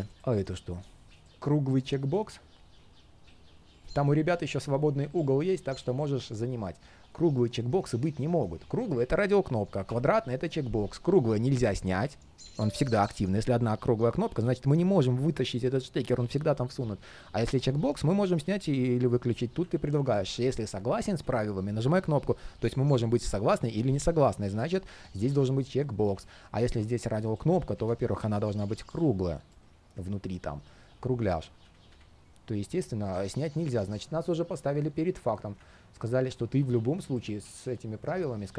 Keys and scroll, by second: 31.2 super+z.